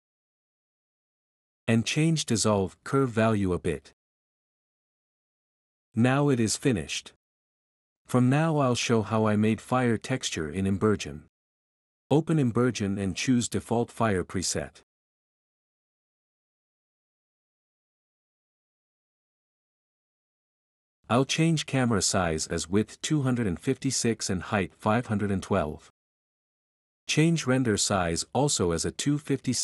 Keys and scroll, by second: 1.4-2.1 typing, 4.6 1, 7.1 F11, 7.9-9.5 typing, 10.6 s.